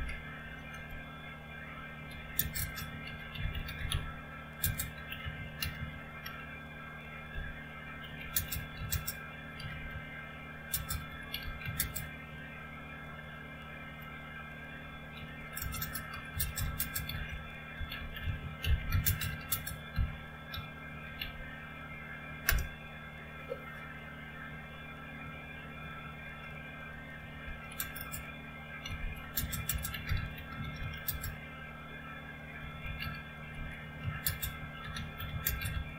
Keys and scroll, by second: 0.0-0.3 typing, 0.7 Return, 2.2-12.1 typing, 13.9 typing, 15.2-22.5 typing, 27.2 typing, 28.6-35.9 typing.